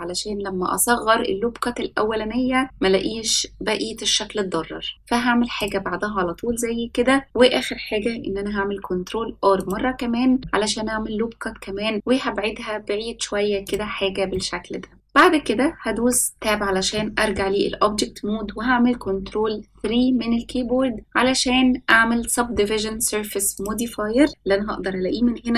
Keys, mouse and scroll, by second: 0.2 c, 8.4 ctrl+r, 14.3 middle click, 14.9-15.9 scroll down 1, 15.9 Tab, 16.9 middle click, 19.5 ctrl+3, 23.5 click.